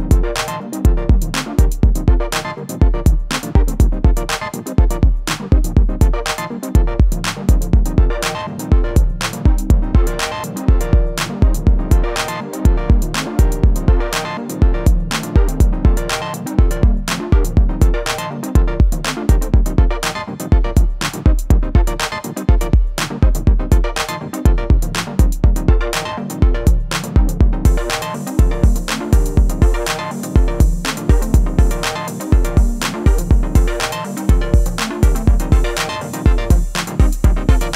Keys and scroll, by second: 29.9 Delete, 34.1 c.